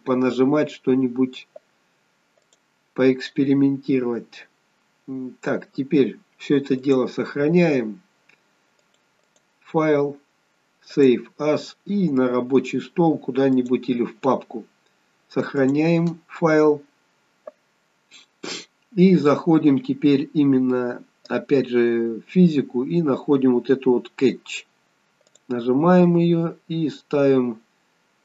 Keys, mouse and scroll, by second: 2.4 click, 6.8 click, 9.3 click, 11.6 click, 19.4-20.1 scroll down 3, 20.1-23.2 scroll down 2, 23.4 scroll down 2, 25.3 click, 25.8-26.7 scroll down 5.